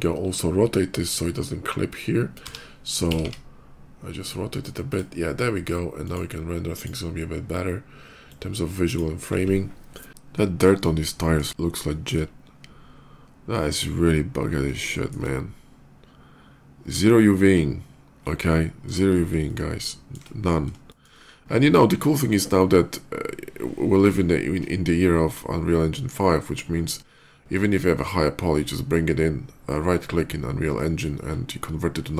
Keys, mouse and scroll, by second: 2.3 r, 3.0 x, 3.2 x, 4.8 click, 5.9 click, 6.6 click, 8.0 click, 10.2 middle click, 10.8 shift+middle click, 11.5 shift+scroll up 1, 11.6 shift+middle click, 14.7 shift+middle click, 18.6-18.9 scroll down 3, 19.3 shift+middle click, 20.6 shift+middle click.